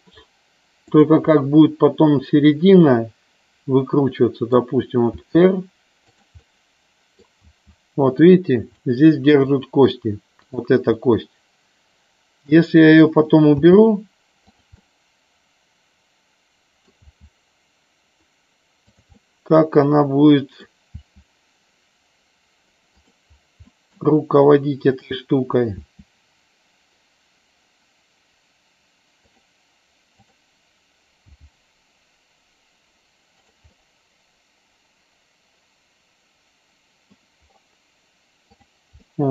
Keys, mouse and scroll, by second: 1.0 click, 1.5 scroll up 1, 1.6-4.8 middle drag, 5.2 r, 6.2 click, 6.4 middle click, 7.4 r, 8.8 middle click, 9.6 middle click, 11.1-12.7 middle drag, 13.7 r, 14.6 click, 14.9-16.9 middle drag, 17.0 r, 18.9 click, 19.3-20.9 middle drag, 20.9 r, 23.0 click, 23.8 middle click, 25.0 click, 25.8 r, 30.2 click, 33.5 click, 33.7 scroll up 1, 34.0-37.3 middle drag, 39.1 scroll up 1, 39.2 middle click.